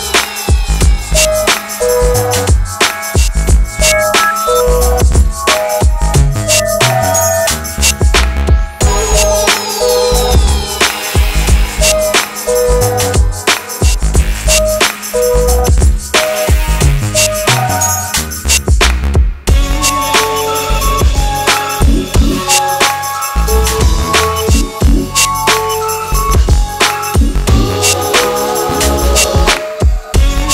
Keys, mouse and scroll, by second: 2.4 click, 5.1 shift+click, 6.7 click, 9.8 shift+click, 11.1 ctrl+g, 11.8 click, 11.8 click, 12.4-14.1 typing, 15.2 click, 19.4-23.3 typing, 24.2 click, 26.6 BackSpace, 27.5 shift+b.